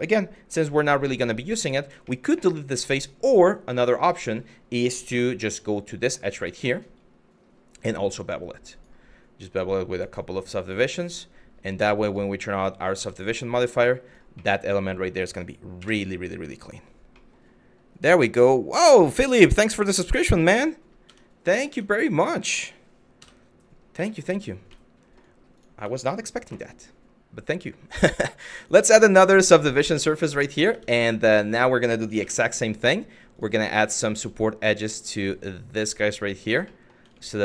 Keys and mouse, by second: 1.8 shift+middle click, 2.5 shift+middle click, 4.7 2, 5.3 click, 6.1 space, 12.6 Tab, 13.1 middle click, 14.0-14.7 middle drag, 15.4 KP_1, 16.9 middle click, 20.7 Tab, 21.3 Tab, 22.8 KP_Divide, 23.8 shift+middle click, 24.4-24.8 shift+middle drag, 25.2 click, 25.6 middle click, 28.2-29.2 drag, 29.7 shift+middle click, 30.3 Tab, 31.0 middle click, 31.8 2, 33.0 click, 34.6 click, 35.4 alt+click, 36.3 middle click, 37.1 alt+click.